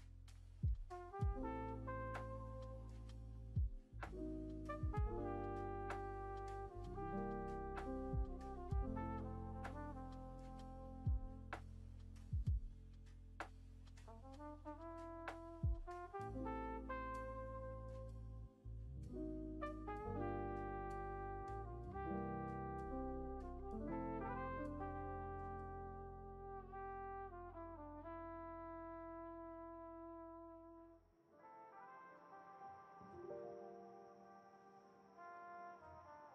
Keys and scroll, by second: 2.2 Return, 2.3 Return, 8.3 g, 15.4-16.2 scroll, 17.5-18.4 scroll, 19.6 F1, 21.5 ctrl+v, 30.5 1, 31.6 s.